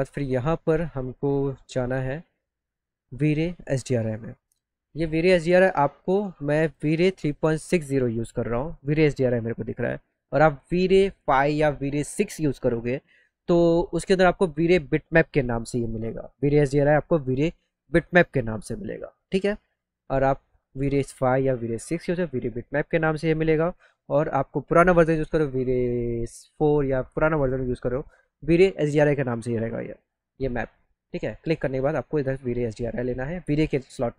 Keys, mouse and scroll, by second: 0.2-0.7 scroll up 3, 3.2 click, 4.9 click, 6.5 click.